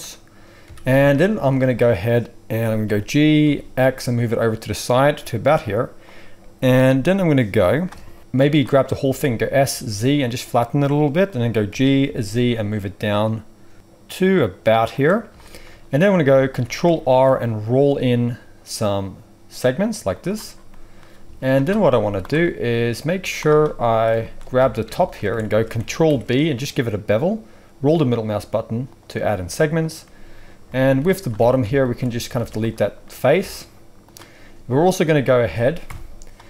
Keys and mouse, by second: 0.0 click, 0.4-8.2 middle drag, 0.6 a, 1.3 z, 2.8 g, 8.2-11.3 drag, 9.0 s, 11.3-25.0 middle drag, 11.6 g, 17.1 ctrl+r, 21.2 z, 22.0 z, 23.1 z, 24.5 alt+a, 25.0 alt+shift+click, 25.1-36.4 alt+shift+middle drag, 26.0 ctrl+b, 30.9 z, 31.3 alt+a, 32.3 z, 33.3 x, 35.8 KP_1.